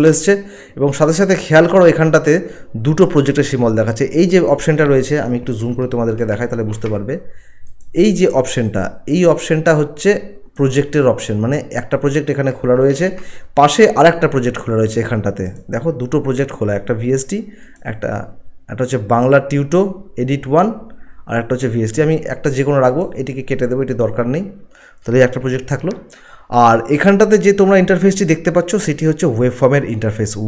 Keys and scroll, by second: 6.1 ctrl+1, 12.9 ctrl+1.